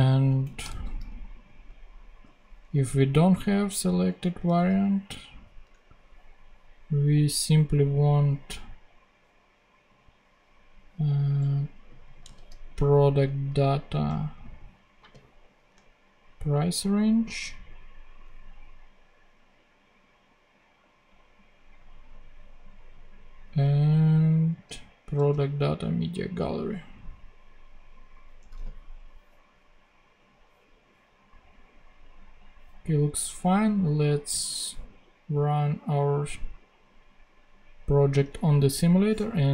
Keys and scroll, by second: 0.2 shift+super+Down, 0.5 shift+super+Down, 0.6 shift+super+c, 1.6 super+c, 4.4 super+v, 5.5 BackSpace, 12.2 super+c, 15.0 super+v.